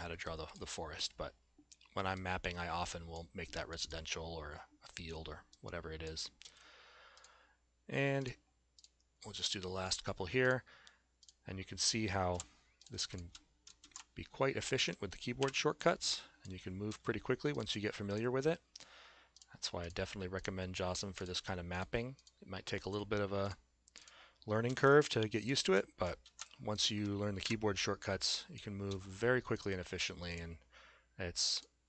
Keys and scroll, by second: 6.4 a, 12.4 s, 13.8 alt+x, 15.4 Delete, 16.9 a, 24.7 s, 26.3 alt+x, 27.4 Delete, 28.9 a.